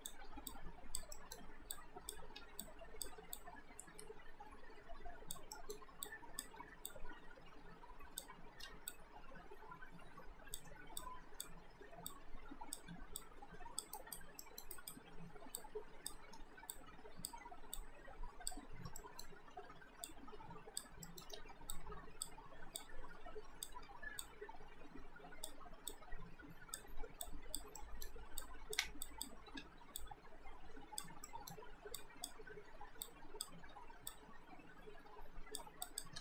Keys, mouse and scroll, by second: 0.3 r, 0.5 click, 1.2 alt+middle click, 1.8 click, 2.3 r, 2.6 click, 3.2 w, 3.4 click, 5.6 alt+middle click, 6.0 click, 6.6 r, 6.9 click, 8.6 w, 8.9 click, 11.8 r, 12.1 click, 12.9 w, 13.2 click, 13.9 alt+right click, 14.5 alt+middle click, 14.7 alt+right click, 15.6 click, 16.3 r, 16.7 click, 17.4 w, 17.7 click, 19.0 alt+middle click, 19.7 r, 20.1 click, 21.0 alt+middle click, 21.3 w, 21.7 click, 23.8 r, 24.2 click, 25.6 w, 25.9 click, 27.1 r, 27.3 click, 27.8 alt+middle click, 28.4 click, 29.0 shift+click, 29.5 r, 30.0 click, 31.3 alt+middle click, 32.0 click, 33.6 r, 34.1 click, 36.1 w.